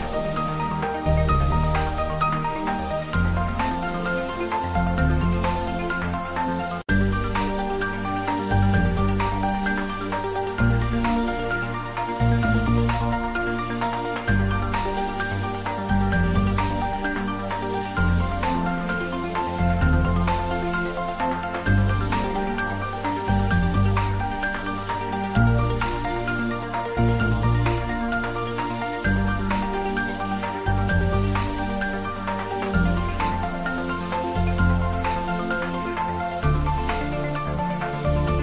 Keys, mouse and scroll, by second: 0.3 click, 0.9 ctrl+r, 1.1 click, 2.4 ctrl+middle click, 3.5 ctrl+r, 4.2 click, 5.8 ctrl+z, 7.6 click, 8.6 Tab, 9.8 ctrl+r, 10.1 click, 12.2 click, 12.4 Tab, 13.5 Tab, 14.2 ctrl+r, 15.4 click, 15.7 Tab, 16.4 ctrl+middle click, 16.7 middle click, 17.1 right click, 17.5 click, 17.8 middle click, 18.1 ctrl+middle click, 18.7 click, 19.0 Tab, 19.8 ctrl+r, 20.4 click, 21.3 ctrl+z, 25.6 click, 27.3 click, 31.0 ctrl+Num_Lock, 31.9-34.8 drag, 34.8 ctrl+r, 35.6 click, 36.3 Tab, 36.3 click, 37.0 Tab.